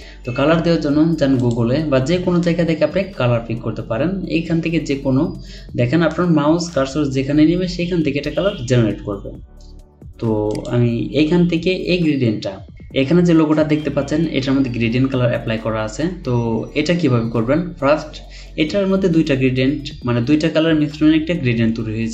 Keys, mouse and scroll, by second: 3.8 scroll down 1.